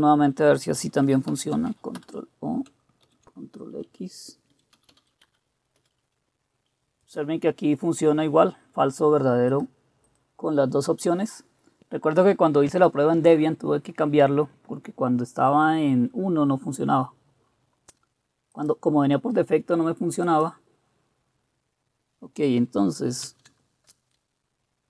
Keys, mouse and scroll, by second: 1.3 ctrl+o, 2.0 Return, 3.1 ctrl+x, 4.3-5.8 typing, 5.8 Return, 23.2 ctrl+c.